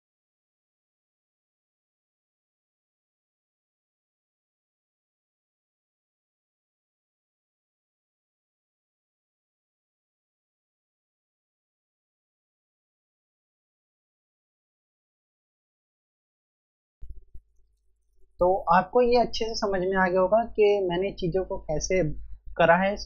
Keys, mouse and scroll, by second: 0.0-0.8 typing, 1.0 click, 4.7 typing, 4.8 click, 15.6 click, 16.7-17.7 scroll down 1.